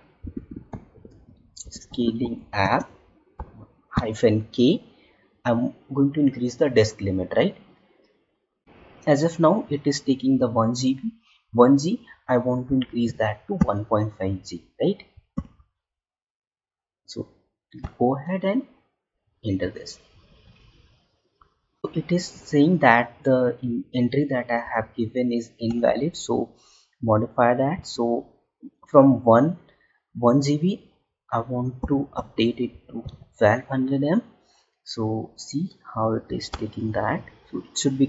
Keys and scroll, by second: 2.5 space.